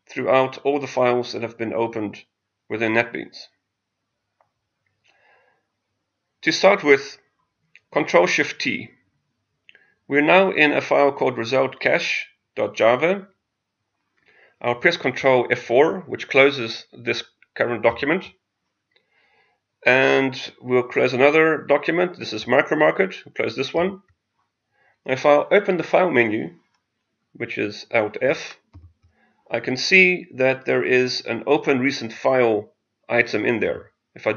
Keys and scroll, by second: 17.8 ctrl+F4.